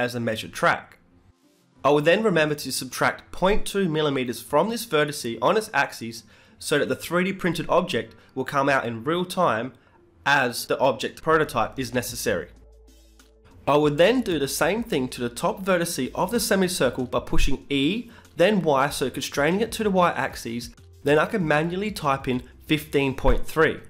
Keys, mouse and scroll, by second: 1.9 Tab, 2.1 Tab, 2.4 g, 3.4 Tab, 5.8 Tab, 6.2 g, 12.1 Tab, 15.7 Tab, 15.9-17.1 right drag, 16.9 Tab, 17.9 g, 18.8 e, 19.4 g.